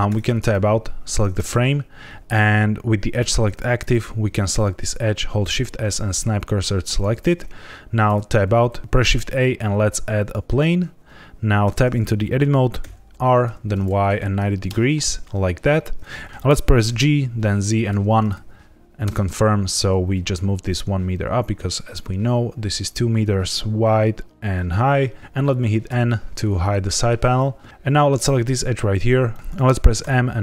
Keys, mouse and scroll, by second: 0.0 Tab, 0.3 click, 1.3 Tab, 3.7 click, 5.3 shift+s, 8.0 Tab, 8.6 shift+a, 8.9 shift+a, 10.7-11.2 scroll down 1, 11.6 Tab, 12.7 r, 13.4 y, 13.9 KP_9, 14.0 KP_0, 14.6 KP_Enter, 16.2 ctrl+z, 16.8 g, 17.6 z, 17.8 KP_1, 19.0 KP_Enter, 25.2 n, 25.8 n, 26.8 shift+middle click, 27.7 ctrl+z, 27.7 click, 28.1 click, 29.2 right click, 29.9 m.